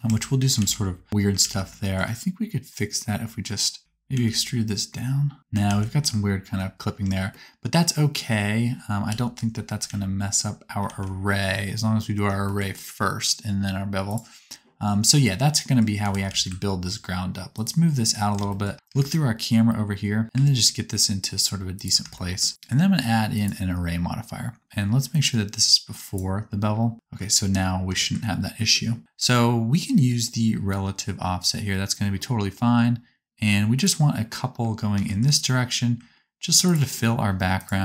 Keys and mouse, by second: 0.1 Tab, 0.7 alt+z, 1.1 alt+click, 1.1 1, 1.4 alt+z, 3.8 e, 5.8 ctrl+z, 7.0 Tab, 9.1 KP_7, 9.8 alt+z, 10.9 alt+z, 14.1-17.4 middle drag, 16.0 g, 18.9 KP_0, 20.2 g, 22.5-27.8 drag, 22.5-26.2 right drag, 34.9 g, 36.9-37.8 right drag.